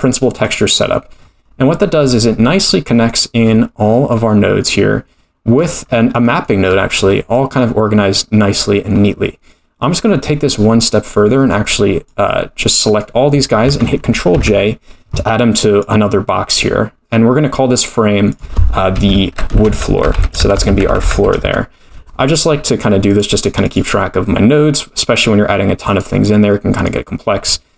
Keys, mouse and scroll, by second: 1.6-2.6 scroll down 13, 2.6 middle click, 3.4-4.1 scroll up 5, 3.9 middle click, 5.6-6.2 scroll up 6, 6.2 middle click, 6.6-7.6 scroll down 10, 7.3 middle click, 7.6-7.9 scroll up 1, 8.8-10.0 scroll down 2, 10.5 click, 11.5-12.0 scroll down 1, 12.0-12.6 scroll down 2, 12.6 click, 14.3 ctrl+j, 15.8 click, 18.3-22.0 drag, 20.0 shift+o, 21.0 shift+o, 23.1 click, 23.6 click, 25.9 click, 26.7 click.